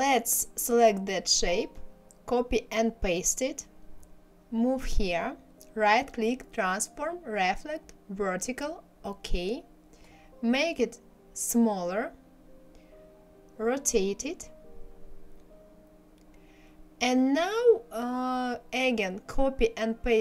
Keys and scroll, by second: 1.4 ctrl+c, 2.0 ctrl+v.